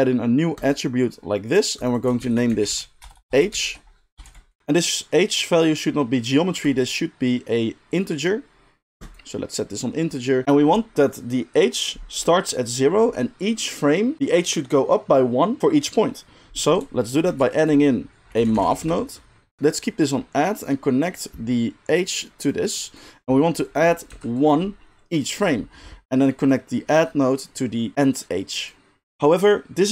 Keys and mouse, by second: 0.7-1.8 drag, 1.8 middle click, 2.0-4.6 shift+drag, 3.1 BackSpace, 3.3 BackSpace, 4.6-6.6 middle drag, 6.6-19.6 drag, 17.2 shift+a, 19.6-21.0 middle drag, 21.0-24.5 drag, 24.5-26.5 middle drag, 26.5-29.9 drag.